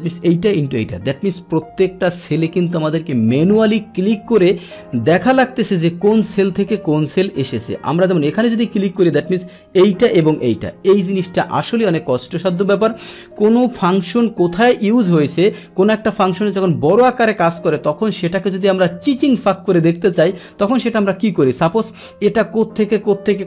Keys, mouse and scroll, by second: 0.7 Return, 7.9 click, 8.0 click, 11.0 Return, 21.7 click.